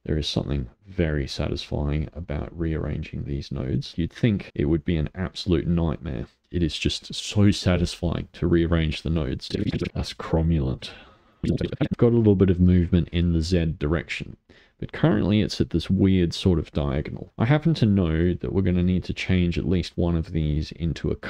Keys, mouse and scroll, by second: 4.1 click, 4.4 middle click, 4.7-5.4 scroll up 1, 5.4-5.9 scroll up 3, 5.9-8.6 middle drag, 8.7 middle click, 9.5 click, 9.6 middle click, 9.7 click, 9.8 middle click, 11.4 click, 11.5 middle click, 11.6 click, 11.7 click, 11.7 middle click, 11.8 click, 11.9-18.1 middle drag, 18.1 click, 18.7-21.2 drag.